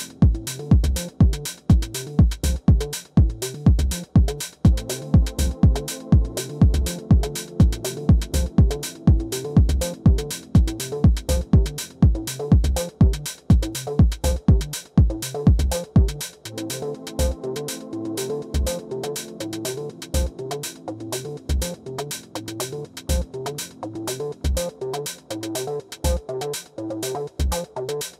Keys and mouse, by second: 1.5 click, 1.9 alt+click, 2.9 alt+middle click, 4.4 3, 5.1 click, 5.3 click, 5.7 click, 6.9 alt+click, 7.4 alt+middle click, 7.7 alt+click, 11.0 alt+middle click, 12.4 click, 13.3 alt+middle click, 13.8 alt+click, 14.9 alt+middle click, 15.7 alt+click, 17.8-20.9 drag, 26.4 click, 27.6 alt+middle click, 28.0-28.1 alt+drag.